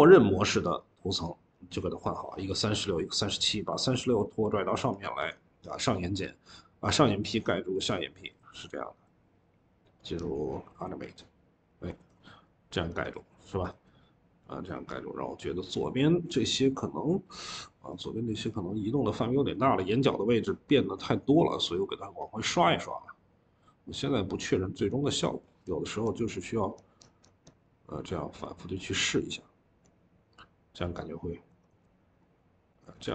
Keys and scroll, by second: 5.1 Escape, 14.2 typing.